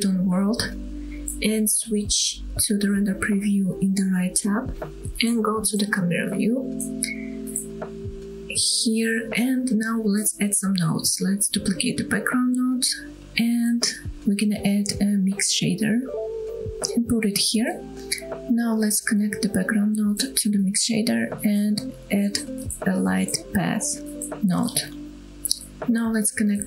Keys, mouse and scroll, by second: 0.3-1.8 scroll down 1, 1.8-2.3 scroll down 3, 3.6 click, 4.6-5.2 scroll down 2, 5.2-5.8 middle drag, 6.0 KP_0, 6.5-7.1 scroll up 5, 7.4-8.4 scroll down 1, 10.0-10.8 scroll up 3, 10.8 click, 11.1 click, 12.4 shift+d, 13.6 click, 13.9 click, 14.2 scroll down 1, 14.4 shift+middle click, 15.0 shift+a, 17.3 click, 18.5 middle click, 19.1-19.7 scroll up 3, 19.9 middle click, 20.9-21.7 drag, 22.0 scroll down 2, 22.4-22.8 drag, 22.8 middle click, 23.0 shift+a, 25.3 click, 26.1-26.6 drag.